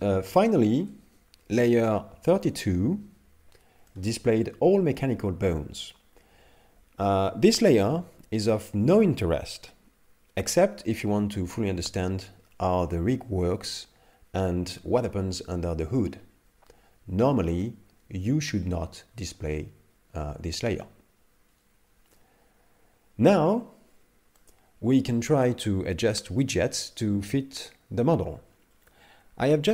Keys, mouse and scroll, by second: 0.3 Tab, 0.8 Tab, 2.4 click, 3.9 middle click, 24.4 middle click.